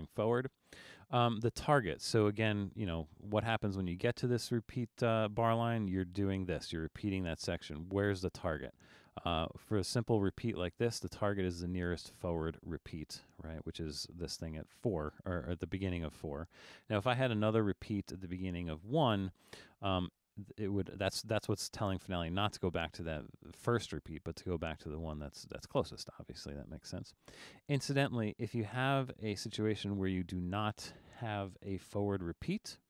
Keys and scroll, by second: 31.7 BackSpace.